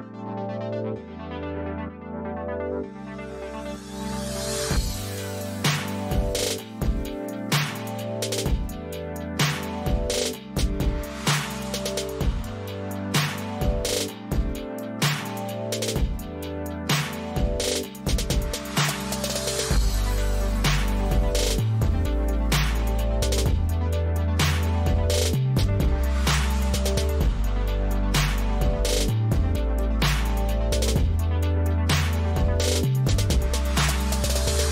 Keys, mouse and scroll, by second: 4.2 click, 8.1-9.1 drag, 9.5 click, 12.9 click, 14.4 click, 16.9 click, 17.3 click, 18.7 click, 19.4 ctrl+c, 21.3 ctrl+v, 23.4-24.7 drag, 31.1 click, 31.8 click, 34.2-34.7 shift+drag.